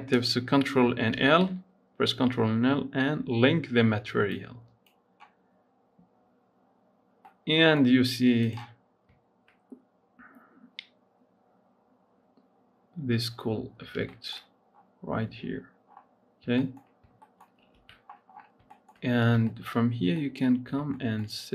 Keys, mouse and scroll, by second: 6.7 scroll down 1, 7.2-8.3 middle drag, 8.3 click, 8.8 scroll down 2, 9.4-9.8 scroll up 4, 13.6-13.9 scroll up 3, 13.9 shift+middle click, 14.2-15.5 scroll up 5, 15.5 scroll down 6, 15.7-16.6 scroll up 5, 16.6 shift+middle click, 16.8 scroll up 2, 17.1 shift+middle click, 17.6 ctrl+s, 17.9-18.8 scroll down 12, 18.8 shift+middle click, 19.0-19.3 scroll up 3, 19.3 shift+middle click, 19.8 scroll up 1, 20.1-21.1 shift+middle drag, 21.1-21.5 scroll up 3.